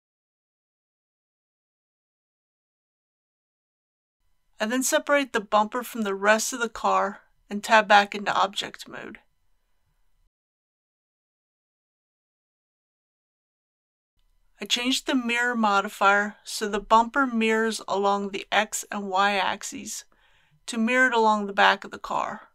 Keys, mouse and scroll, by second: 0.8 alt+a, 11.2 p, 11.9 click, 12.7 Tab, 16.1 click.